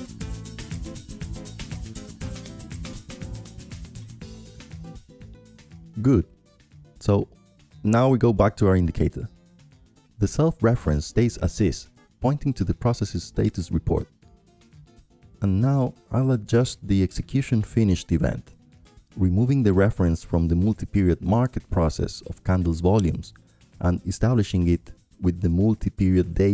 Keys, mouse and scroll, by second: 0.0-3.0 right drag, 3.5-5.3 drag, 6.5-7.7 drag, 9.5-10.6 right drag, 10.9 click, 12.1-15.7 drag, 17.9-19.6 drag, 20.9-26.5 drag, 22.3 ctrl+Left, 23.6 ctrl+Right, 24.0 ctrl+Up, 24.1 ctrl+Up, 25.1 ctrl+Up, 25.4 ctrl+Up.